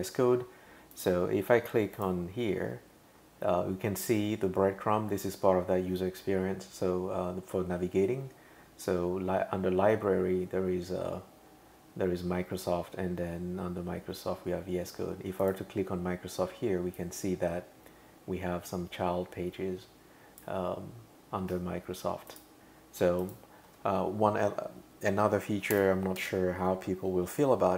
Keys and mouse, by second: 0.9 click, 2.0 click, 15.4 click, 17.0 click, 22.3 click, 23.2 click, 25.8 Return, 26.2 Tab.